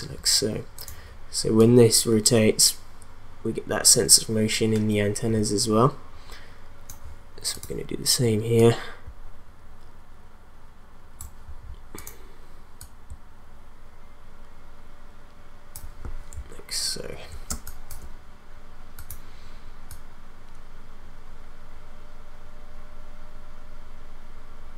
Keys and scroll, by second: 17.5 space.